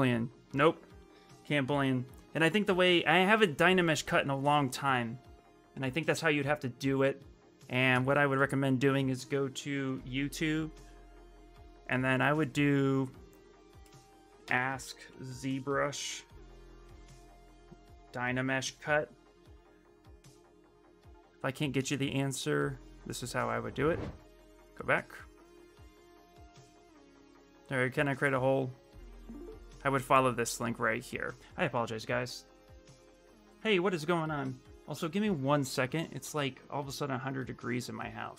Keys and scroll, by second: 9.4-10.3 typing, 14.0-19.6 typing, 31.5 ctrl+c, 33.3 ctrl+v, 33.9 Return.